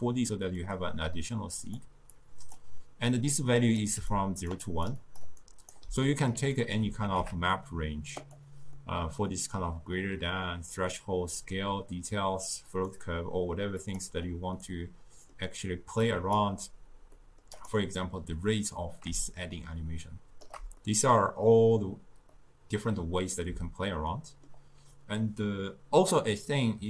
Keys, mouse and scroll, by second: 3.4-4.1 drag, 4.1-5.4 typing, 4.2 click, 4.7 click, 5.1 click, 6.0-7.2 middle drag, 7.2 a, 8.2 click, 8.8-12.7 middle drag, 12.7 click, 13.9 click, 14.6-16.1 middle drag, 16.1-17.2 drag, 17.2 middle click, 17.6 click, 18.4-20.8 drag, 20.8-26.8 middle drag.